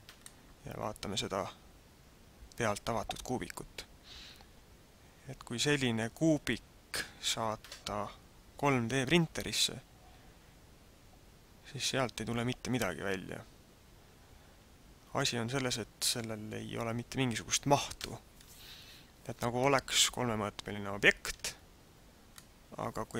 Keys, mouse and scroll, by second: 0.2 middle click, 19.6 middle click, 19.6 scroll up 1, 21.7 scroll down 1, 22.3 middle click.